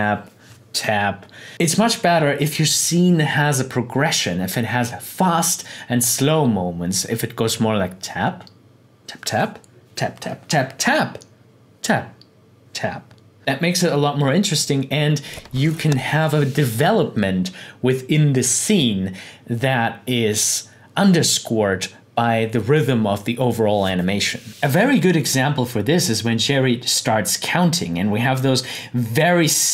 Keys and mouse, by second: 24.5 click, 28.7-29.7 drag.